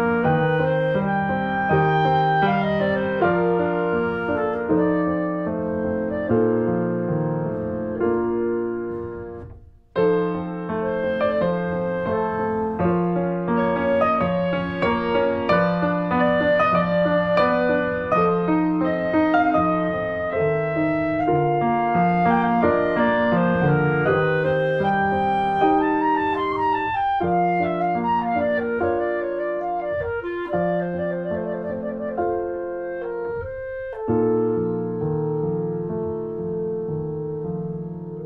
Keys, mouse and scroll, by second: 2.3 scroll up 3, 2.6 click, 3.3 q, 3.4 click, 3.6 Tab, 3.7 click, 3.8 click, 4.7 click, 5.0 shift+d, 5.4 click, 5.6 shift+middle click, 6.3 shift+middle click, 6.5 click, 6.6 scroll down 1, 6.7 middle click, 7.1 middle click, 8.0 scroll down 2, 8.2 middle click, 8.7 scroll up 1, 8.9 ctrl+s, 8.9-10.6 shift+middle drag, 10.6 click, 11.7 Tab, 11.8 scroll up 1, 12.2 shift+middle click, 12.4 click, 12.5 shift+middle click, 12.7 r, 17.0 shift+middle click, 17.3 click, 18.2 s, 20.4 click, 20.5 Tab, 20.7 click, 20.8 shift+d, 21.4 click, 22.4 ctrl+z, 22.5 click, 22.7 Delete, 23.0 click, 23.2 shift+d, 23.7 click, 24.3 shift+middle click, 24.5 s, 25.4 click, 26.0 click, 27.3 click, 27.8 click, 28.0 middle click, 28.7 click, 29.4 click, 29.6-30.8 shift+middle drag, 30.8 ctrl+s, 30.9 click, 31.0 shift+middle click, 31.3 click, 31.5 Delete, 31.7 click, 31.9 alt+middle click, 32.3 ctrl+s, 33.1 click, 34.1 middle click, 34.5 ctrl+a, 34.9 scroll down 2, 35.0 middle click, 35.2 ctrl+s, 35.4 click, 35.6 shift+middle click, 36.1 click, 36.7 alt+middle click, 36.9 s, 37.6 middle click, 37.9 click.